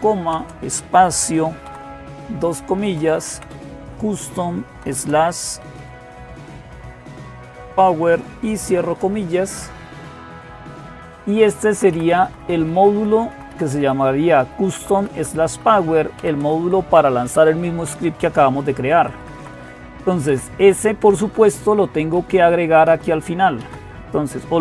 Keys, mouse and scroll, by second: 0.1 typing, 1.5 typing, 2.6-8.5 typing, 10.8 Right, 11.3 Left, 11.5 Left, 11.7 Left, 11.9 Left, 12.1 Left, 12.4 Left, 12.6 Left, 12.9 Left, 13.1 Left, 13.3 Left, 13.7 Left, 14.2 Right, 14.4 Right, 14.6 Right, 14.8 Right, 14.9 Right, 15.3 Right, 15.8-16.9 typing, 18.5-19.3 typing, 19.3 Left, 20.1 Left, 20.8-23.2 typing, 23.4 Down.